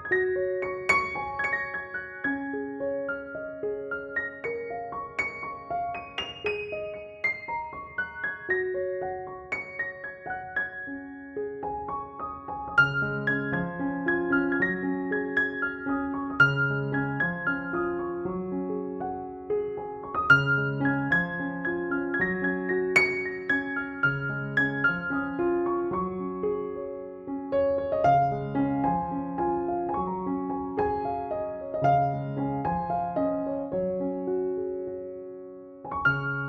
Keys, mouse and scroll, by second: 0.2 click, 1.2 space, 1.3 click, 1.6 space, 2.1 ctrl+j, 2.7 ctrl+b, 3.5 ctrl+=, 3.9-6.2 drag, 6.2 ctrl+=, 8.0-9.2 drag, 11.4 space, 11.7 drag, 11.8 space, 11.9-12.8 b, 12.8 ], 13.0-15.1 drag, 15.1 [, 15.2-15.7 click, 15.9 ctrl+-, 16.3 ], 16.4 ], 16.6 click, 17.1 space, 17.2-20.7 click, 17.5 space, 17.7-20.1 drag, 20.1-21.7 typing, 20.4 click, 20.9-21.7 click, 21.7-25.4 drag, 25.2 [, 25.4 [, 25.6-28.2 drag, 28.2-30.7 typing, 28.8-29.3 click, 30.1-32.2 click, 30.9-32.2 drag, 32.2 space, 32.5 click, 32.7 space, 32.9-33.6 click, 33.9 ctrl+-, 35.1 ctrl+=, 35.4 click.